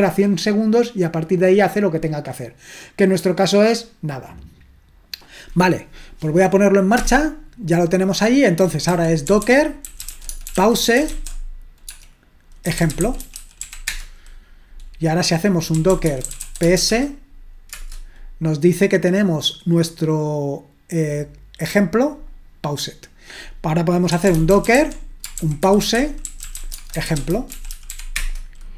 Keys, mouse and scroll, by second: 7.0 Return, 8.7-13.9 typing, 15.5-17.7 typing, 23.9-28.4 typing.